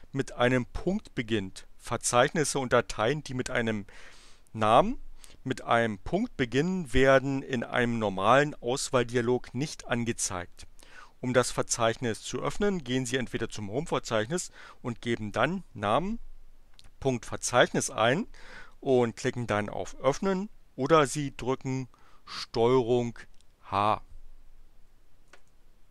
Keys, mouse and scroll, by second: 22.9 click, 25.0 ctrl+h.